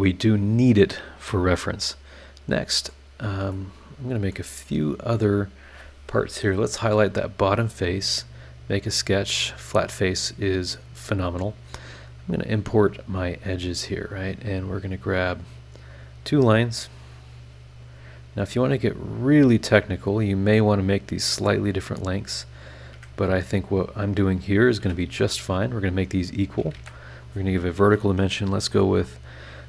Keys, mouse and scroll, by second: 1.8-3.1 middle drag, 1.9-3.1 right drag, 3.1-3.4 scroll down 1, 3.5-4.5 middle drag, 3.6 right click, 4.5-5.3 scroll up 3, 5.6 click, 8.0 click, 9.7 click, 10.4 scroll down 1, 11.1-11.6 scroll up 3, 12.6 click, 13.8 click, 15.5 click, 19.1 click, 20.1 click, 21.3 click, 22.5 click, 22.9 Escape, 23.8 click, 24.6 click, 24.8 e, 26.7 shift+v, 27.1 shift+click.